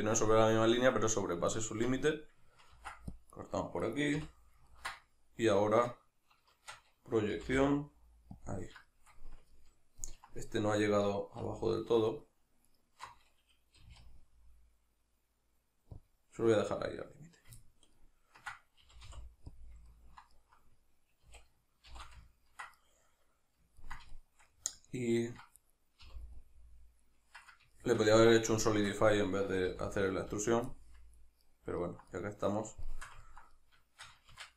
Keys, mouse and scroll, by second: 1.5-3.5 ctrl+middle drag, 2.7 ctrl+r, 3.8 right click, 4.1 l, 4.7-8.5 middle drag, 6.5 shift+Tab, 7.3 g, 8.5 click, 8.9-10.5 shift+middle drag, 10.5-12.2 right drag, 12.7 alt+shift+right click, 13.8 g, 16.1 click, 17.6-19.6 ctrl+middle drag, 18.8 g, 19.6 click, 19.9-21.2 ctrl+middle drag, 21.2 a, 21.9 shift+n, 22.3 ctrl+middle click, 24.2-25.6 shift+middle drag, 25.6 right click, 26.0 l, 26.4-34.5 middle drag, 29.7 l, 34.3 shift+Tab.